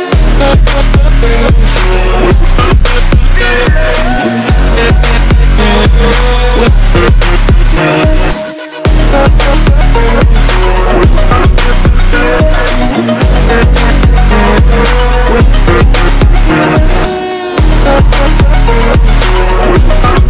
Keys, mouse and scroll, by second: 3.7 click, 4.7 click, 7.1 click, 15.6 click.